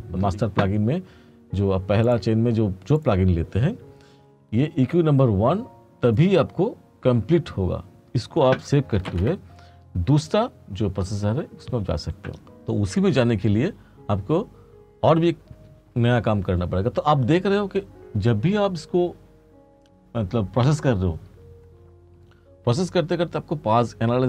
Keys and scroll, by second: 9.2 ctrl+s.